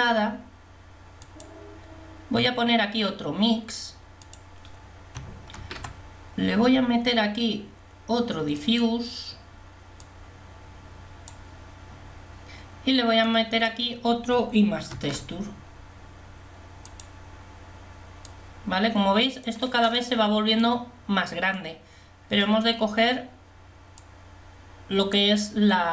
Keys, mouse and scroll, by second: 5.9 shift+d, 15.3 shift+d.